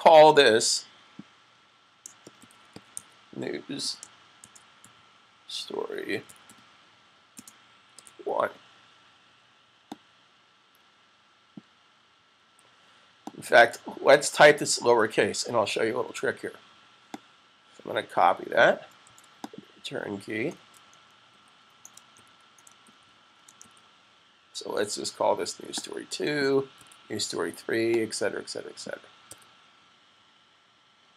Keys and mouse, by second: 1.9-7.8 typing, 1.9 shift+click, 9.8 click, 13.1 click, 14.9 s, 17.1 click, 17.1 typing, 18.9 super+c, 20.3-21.1 typing, 26.4-29.7 typing, 27.7 click, 29.2 click.